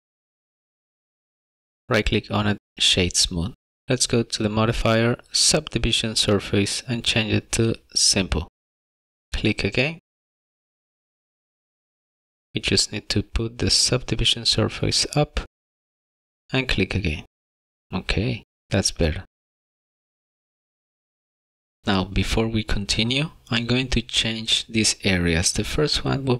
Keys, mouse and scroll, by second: 0.3 click, 1.6 click, 1.8 click, 2.9 right click, 4.3 click, 5.4 click, 8.2 click, 9.5 click, 11.1 click, 12.3 click, 13.0 click, 16.1 click, 17.8 click, 19.1 click.